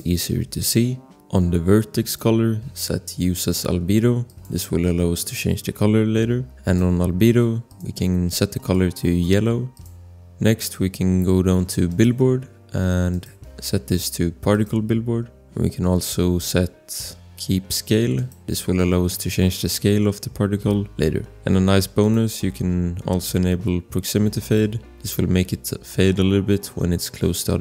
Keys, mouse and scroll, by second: 1.1 scroll, 2.0 click, 4.5 click, 12.2-13.1 scroll, 13.1 click, 14.8 click, 15.4-15.8 scroll, 16.8 scroll, 18.1 click, 21.2 scroll, 22.0 click, 24.4 click, 26.3 scroll.